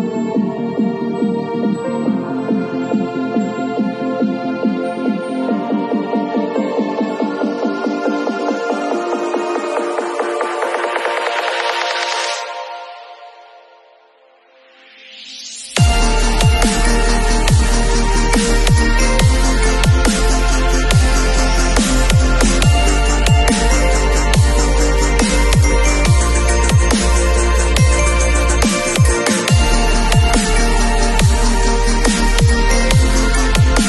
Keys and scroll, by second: 1.4 v, 13.3-14.2 typing, 23.4 v, 27.3 b.